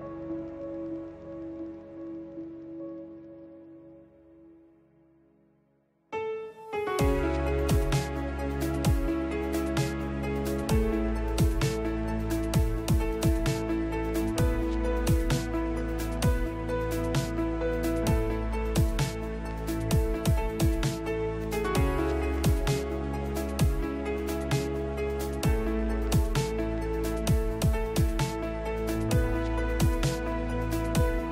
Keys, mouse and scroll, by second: 0.7 click, 1.4 Tab, 3.7 shift+s, 7.9 ctrl+h, 12.6 Tab, 17.2 middle drag, 23.5 shift+Left, 27.9 right click, 28.3 click, 28.9 shift+s.